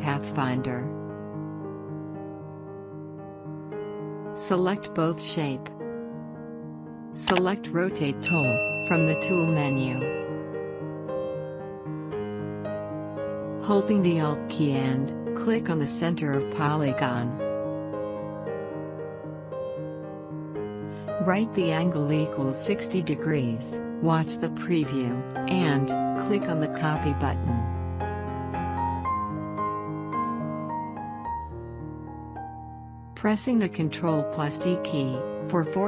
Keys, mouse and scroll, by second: 2.8-8.6 drag, 11.5 click, 17.6 alt+Num_Lock, 17.6 alt+click, 25.0 click, 29.4 click, 32.5 ctrl+d.